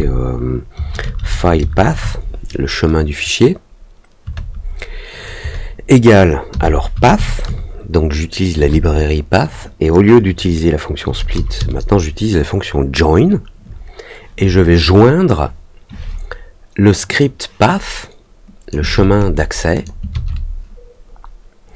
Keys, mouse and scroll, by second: 17.1-18.6 drag, 19.7 click.